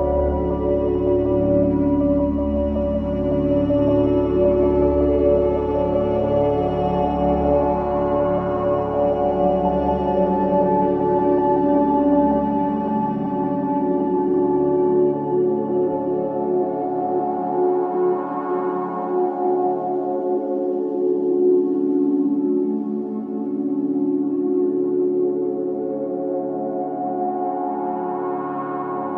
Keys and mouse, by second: 0.0 alt+click, 3.1 typing, 4.4 click, 5.3 typing, 6.2 Escape, 6.9-7.9 alt+drag, 6.9-8.0 typing, 9.0 typing, 10.3-11.9 alt+drag, 12.1 typing, 13.2-15.1 alt+drag, 20.0 7, 22.0 click, 23.2 click, 24.6 click, 25.4-25.8 drag, 26.4 ctrl+s, 27.1 click, 28.5 alt+click.